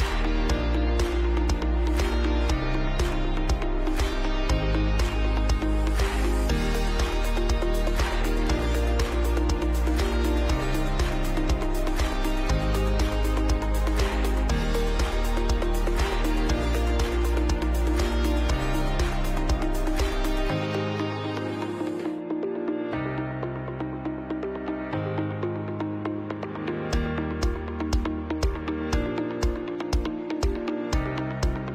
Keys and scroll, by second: 8.8 ctrl+alt+b, 9.6-11.7 typing, 14.7 ctrl+shift+], 14.9 Left, 15.7 Left, 15.7 Left, 15.8 Left, 15.9 Left, 16.0 Left, 16.0 Left, 16.1 Left, 16.3 Left, 16.3 Left, 16.4 Left, 16.5 Left, 16.6 Up, 16.7 Up, 17.0 Left, 17.6 Right, 17.7 Right, 18.7 ctrl+c, 18.8 ctrl+b, 19.1 Down, 19.3 Down, 19.4 Right, 19.6 Right, 20.7 Down, 20.9 Down, 21.0 Right, 21.9 ctrl+alt+space, 22.5 ctrl+alt+b, 22.6 ctrl+alt+space, 26.2 ctrl+alt+b, 26.3-31.7 typing.